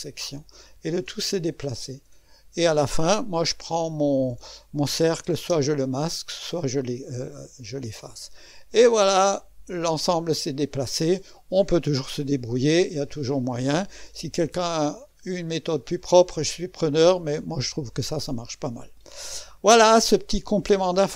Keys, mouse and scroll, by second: 0.0-1.1 drag, 1.8 click, 2.2 middle click, 2.9 click, 3.7-4.9 scroll down 1, 4.9-6.9 drag, 5.4 space, 6.9 middle click, 7.5-9.0 drag, 9.0 middle click, 9.7-10.8 drag, 11.5 click, 12.2 space, 13.1-14.2 drag, 14.2-14.6 scroll up 1, 14.6-16.8 drag, 16.8-17.5 scroll down 1, 17.5-20.0 drag.